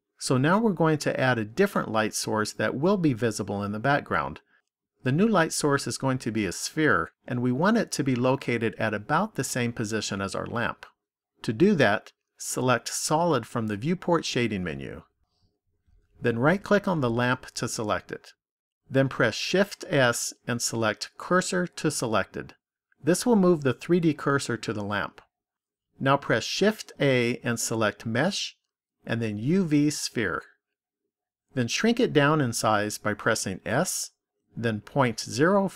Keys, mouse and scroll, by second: 11.9 click, 14.5 click, 16.8 right click, 19.2 shift+s, 26.6 shift+a, 33.4 s.